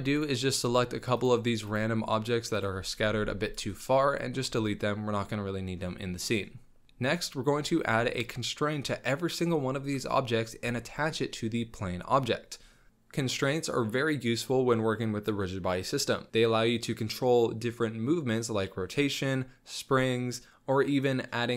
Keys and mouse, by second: 0.1-0.6 middle drag, 1.6 shift+click, 2.5 shift+click, 3.0 x, 4.4 z, 4.8 click, 4.9-5.7 middle drag, 6.1-6.8 drag, 7.7 shift+middle drag, 18.0 space.